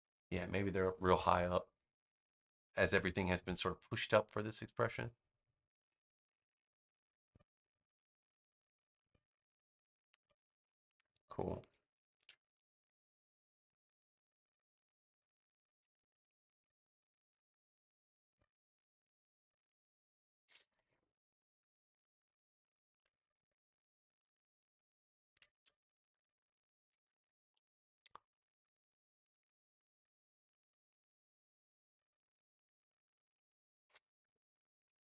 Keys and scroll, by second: 9.9 space, 12.1 super+v, 23.1 BackSpace, 25.2 super+j.